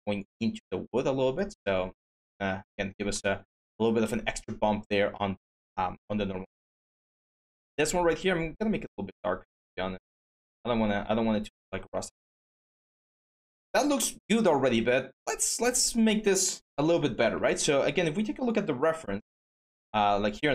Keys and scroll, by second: 17.2 Tab.